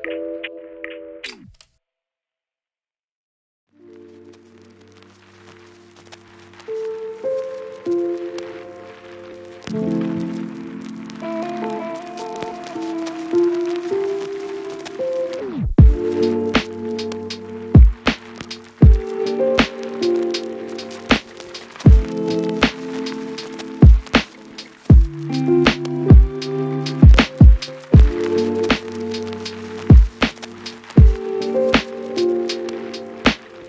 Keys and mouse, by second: 1.1 ctrl+click, 1.7 Tab, 1.7 a, 3.0-4.6 drag, 3.4 KP_0, 3.8 u, 4.1 KP_Divide, 4.1 a, 6.5 click, 6.8 middle click, 7.0 shift+click, 7.5 ctrl+shift+j, 8.1 g, 8.3 ctrl+z, 8.3 ctrl+click, 8.6 shift+click, 9.0 ctrl+shift+click, 9.1 ctrl+j, 9.6 q, 9.8 Tab, 9.9 Tab, 10.0 Tab, 10.2 Tab, 10.4 a, 10.4 3, 10.6 click, 10.8 click, 11.1 click, 11.3 shift+middle click, 11.4 1, 11.6 shift+middle click, 12.1 ctrl+z, 12.2 shift+middle click, 12.5 shift+middle click, 12.7-15.1 typing, 12.8 shift+click, 13.0 shift+click, 13.3 Tab, 13.6 shift+click, 15.2 click, 15.6 shift+click, 15.9 shift+click, 16.8 middle click, 17.1 ctrl+a, 18.5 KP_0, 18.9 Return, 19.6-21.1 middle drag, 22.4 u, 23.1 u, 23.8 u, 24.1 a, 25.6 shift+middle click, 26.4 shift+middle click, 27.0 middle click, 29.3 a, 30.2 Tab, 30.3 middle click, 30.6 Tab, 30.8-32.0 shift+middle drag, 31.0 a, 32.3 ctrl+s.